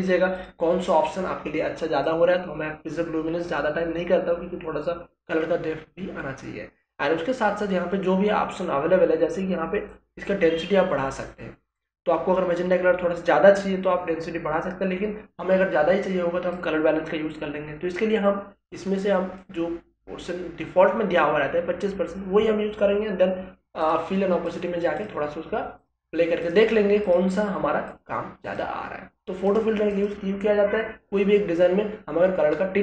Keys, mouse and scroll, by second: 9.9-19.4 drag, 19.4-23.8 drag.